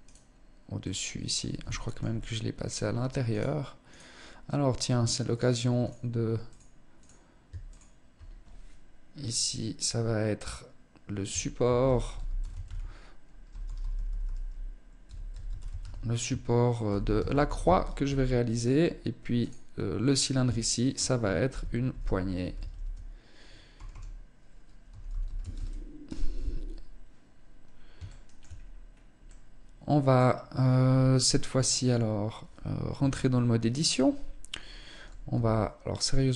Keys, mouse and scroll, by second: 0.2 middle click, 1.2 shift+middle click, 1.6 middle click, 2.7 right click, 3.3 right click, 4.7 click, 5.2 click, 5.8 click, 6.3 click, 7.1 ctrl+click, 18.7 click, 20.1 ctrl+click, 27.5 shift+middle click, 27.9-28.6 scroll up 3, 28.6 middle click, 32.3 Tab, 34.7 s.